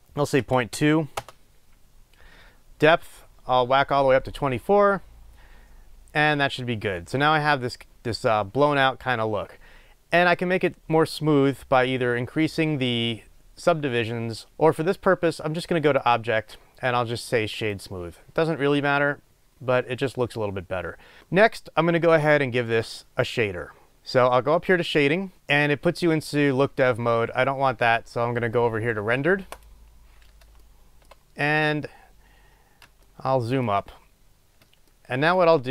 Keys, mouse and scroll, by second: 1.4 Return, 16.0-25.3 drag, 30.6-35.7 shift+middle drag, 31.9-32.8 scroll up 2, 32.8 scroll up 1, 34.3-35.0 scroll up 2.